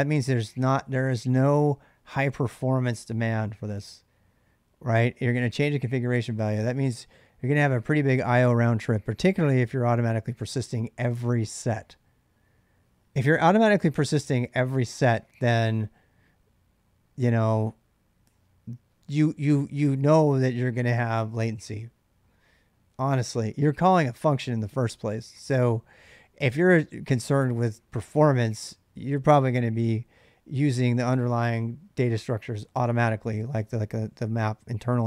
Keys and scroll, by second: 8.4-9.9 typing, 23.7-24.4 h.